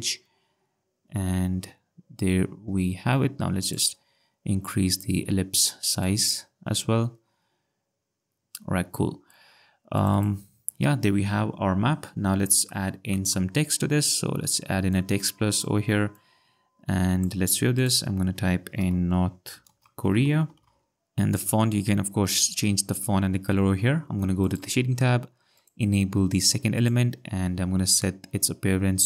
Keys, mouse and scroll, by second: 4.9 click, 9.9 click, 12.7 click, 14.9 click, 16.2 click, 18.8-20.7 typing, 24.4 click.